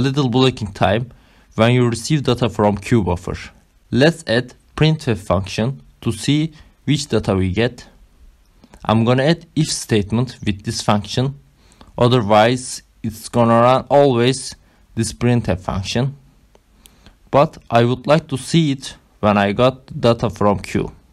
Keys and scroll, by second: 3.0 Return, 3.0-10.9 typing, 4.9 Left, 11.2 Up, 12.1 shift+9, 12.7 ctrl+alt+7, 12.8 Up, 13.3 Right, 13.6 BackSpace, 13.7 Up, 14.6 Right, 14.7 Up, 14.7-15.8 typing, 16.1 Down, 16.2 Left, 17.3 ctrl+alt+7, 17.5 Down, 18.3 ctrl+alt+0, 19.1 Down, 19.9 ctrl+alt+0, 21.0 Up.